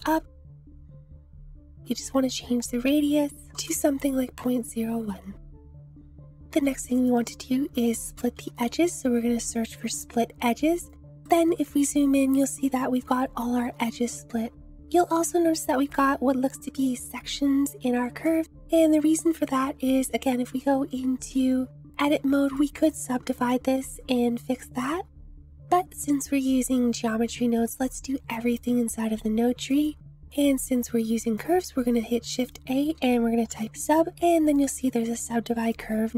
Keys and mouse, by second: 3.5-4.6 drag, 5.5-5.9 drag, 6.2 click, 6.5 shift+a, 12.2 shift+drag, 13.8-14.6 drag, 18.2 shift+click, 19.9 Tab, 22.5 right click, 22.9 click, 23.3 right click, 25.5 Tab, 25.6 ctrl+z, 27.7 Tab, 29.6 click, 31.2 click, 31.6 shift+a.